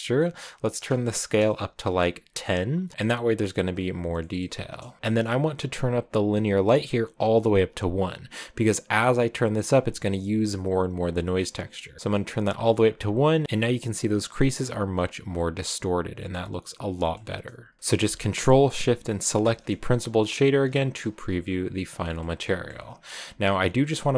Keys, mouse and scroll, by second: 2.7 click, 4.7 middle click, 4.9 click, 6.1-11.9 drag, 10.8 right click, 13.2 middle click, 15.2 scroll down 3, 15.7 scroll down 1, 16.0-16.6 scroll up 2, 16.6-17.0 scroll down 1, 17.0-19.2 middle drag, 19.2 ctrl+shift+click, 20.6 shift+middle click, 20.8-22.0 scroll down 2, 22.0 middle click, 22.7-23.3 scroll up 8, 23.5 click.